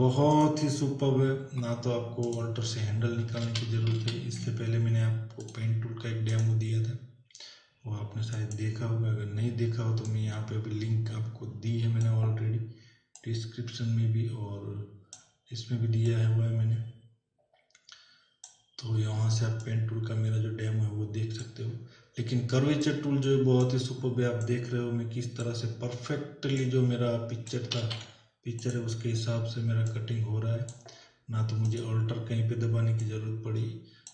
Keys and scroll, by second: 3.7 ctrl+z, 27.7 ctrl+z.